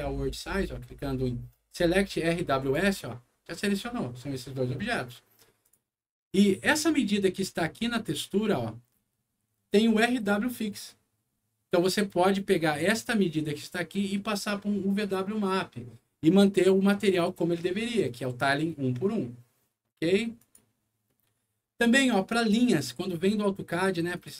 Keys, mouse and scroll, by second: 2.6 click, 5.6 click, 6.2 scroll up 2, 6.8 click, 7.9 click, 8.6 middle click, 12.6 click, 20.3 click, 21.0 middle click, 23.1 middle click, 24.1 click.